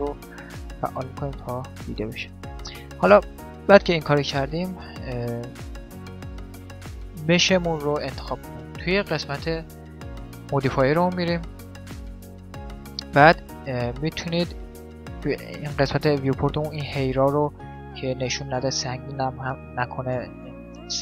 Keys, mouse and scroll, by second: 0.4-2.2 drag, 2.2-5.5 middle drag, 5.5-7.2 right drag, 6.0 middle click, 6.2 click, 7.1 middle click, 9.2-10.9 drag, 13.6-15.6 middle drag, 18.4-20.2 middle drag.